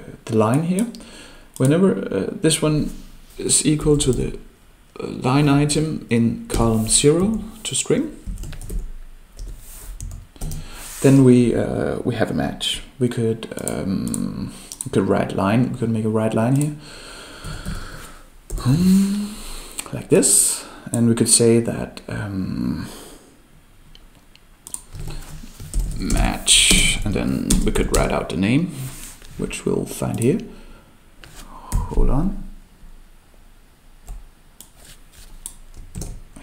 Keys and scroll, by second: 36.0 ctrl+c.